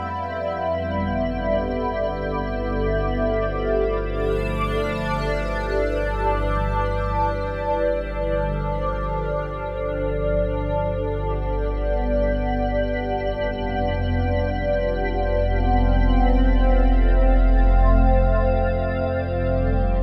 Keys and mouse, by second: 0.4 click, 3.7 click, 7.7 shift+s, 10.2 click, 12.2-13.0 typing, 13.8 click, 14.5 typing, 15.7 typing, 16.5 ctrl+s.